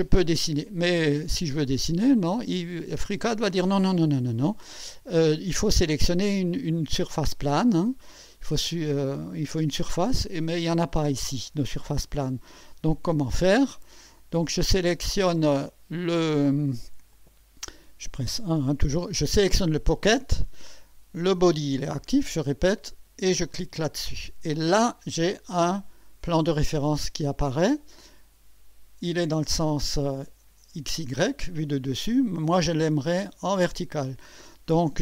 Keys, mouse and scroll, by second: 9.3-11.7 drag, 12.1 1, 14.7 click, 17.1 click, 18.5 1, 19.2 click, 23.5 click.